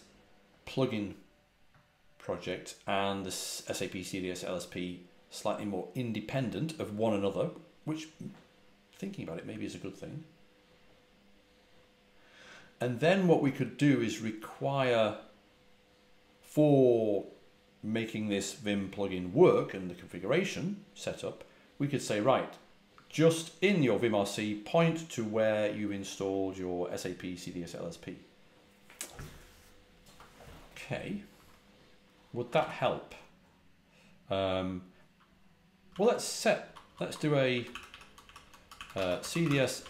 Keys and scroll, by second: 30.0 typing, 32.4 ctrl+a, 32.5 ctrl+l, 35.8 ctrl+l, 36.5-39.8 typing.